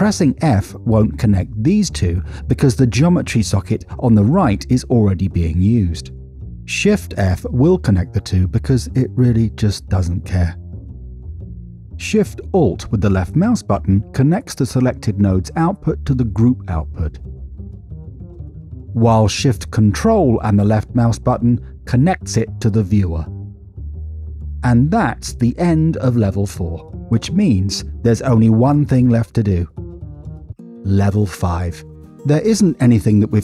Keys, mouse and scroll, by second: 0.3 drag, 3.3 f, 7.8 shift+f, 11.7 middle click, 12.4 middle click, 15.3 alt+shift+click, 18.1 middle click, 18.8 middle click, 21.8 ctrl+shift+click, 25.0 middle click, 25.7 middle click, 28.7-30.5 drag.